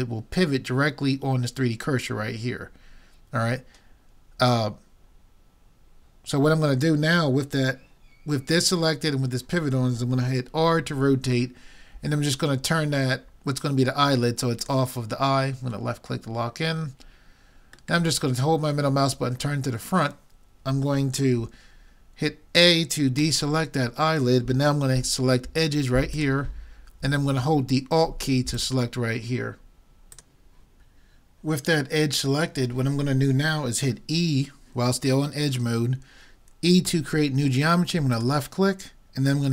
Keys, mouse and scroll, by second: 10.6 r, 14.7-16.6 drag, 18.0-19.9 middle drag, 23.2 a, 26.1-27.8 drag, 27.8 middle click, 28.6-30.2 drag, 36.9 e.